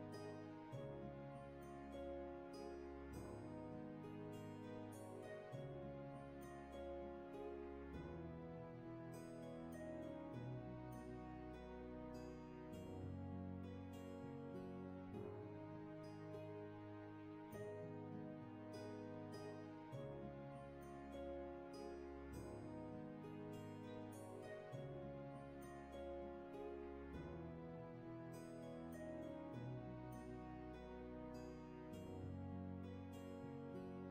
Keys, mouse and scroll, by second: 5.8 ctrl+z, 14.8 ctrl+z, 23.3 ctrl+z, 29.1 ctrl+z.